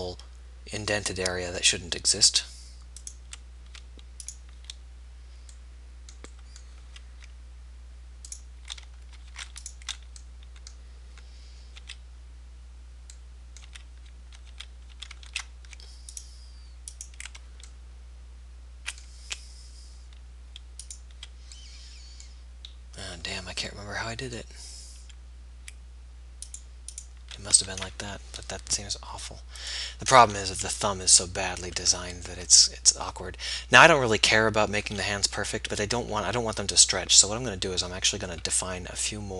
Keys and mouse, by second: 0.5-2.5 middle drag, 3.3-6.9 middle drag, 6.9 z, 9.4 ctrl+z, 12.0 z, 13.8 z, 14.6 z, 15.1 z, 21.0-22.9 right drag, 26.6-28.9 right drag, 29.7 click, 31.5 middle click, 31.9 Tab, 32.7 Tab, 37.3 middle click.